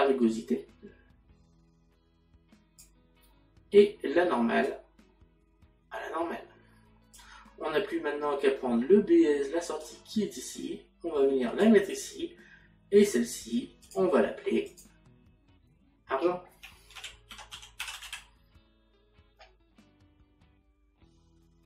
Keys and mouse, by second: 4.7 click, 9.9 click, 13.8 click, 17.0 a.